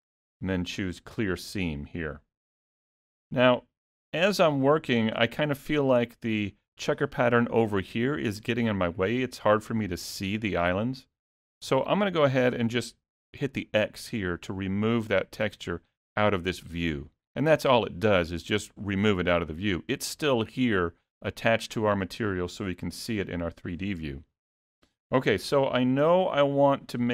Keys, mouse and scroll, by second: 16.8 click, 18.0-18.6 scroll up 4, 18.6 middle click, 18.6-19.2 scroll up 1, 25.3 middle click.